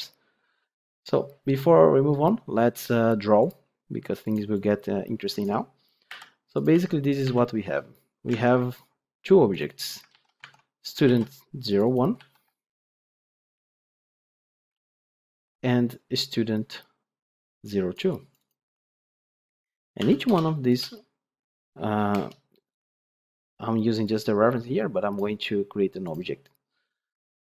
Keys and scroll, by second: 10.0 ctrl+c.